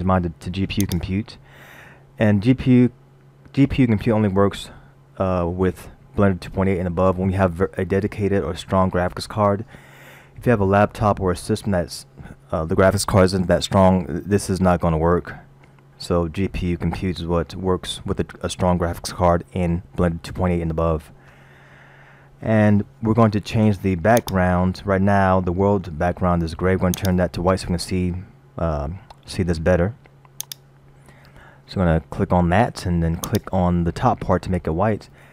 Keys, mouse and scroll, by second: 10.9-12.0 scroll down 1, 24.2 click, 27.0 click, 30.5 click, 35.0 scroll up 1.